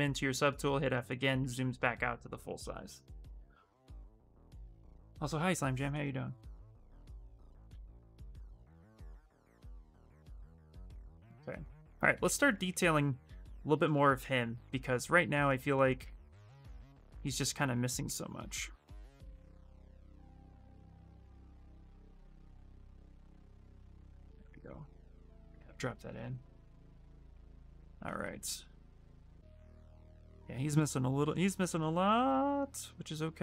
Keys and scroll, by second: 0.1 f, 13.2 s, 18.1 w, 25.3 q.